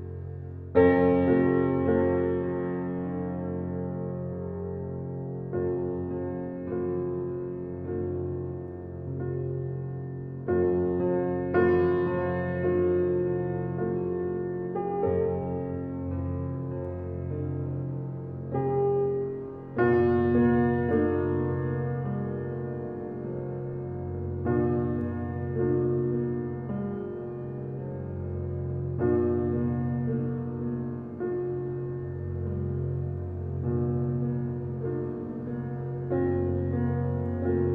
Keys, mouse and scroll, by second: 0.0-1.0 middle drag, 1.0 click, 1.8 click, 2.4 click, 4.1 click, 4.6-5.2 drag, 5.9 click, 6.2 click, 7.6 drag, 8.0 click, 9.6 click, 10.5 click, 10.9 click, 11.7 Tab, 11.9 scroll down 2, 12.2-12.6 middle drag, 12.6 scroll down 2, 12.8-14.6 middle drag, 14.6 click, 15.1 click, 15.6 scroll up 2, 16.0-16.6 shift+middle drag, 16.6 click, 16.8 Tab, 17.3 Tab, 17.5 click, 17.7 Tab, 18.3 middle click, 19.0 click, 20.0-20.7 scroll up 2, 20.7 click, 21.3 click, 21.9-23.7 middle drag, 23.7 alt+click, 24.7 click, 26.4 click, 26.9 scroll down 1, 27.8 click, 28.3 click, 29.6 click, 29.9 Tab, 30.6-31.3 middle drag, 31.3 scroll up 2, 32.2 Tab, 32.7 alt+click, 33.8 alt+click, 34.6 alt+click, 35.6 click, 36.0 Tab, 36.5 Tab, 36.7 click, 37.3-37.7 drag.